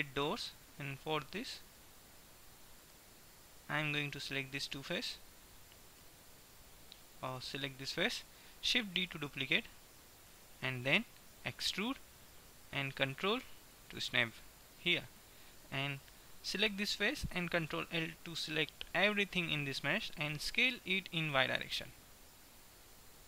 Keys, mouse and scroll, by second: 1.2 middle click, 3.9-4.9 middle drag, 4.9-6.2 right drag, 6.2 middle click, 7.9 middle click, 9.2 shift+d, 11.5 e, 14.4 click, 15.2-17.0 middle drag, 17.5 ctrl+l, 20.5 s.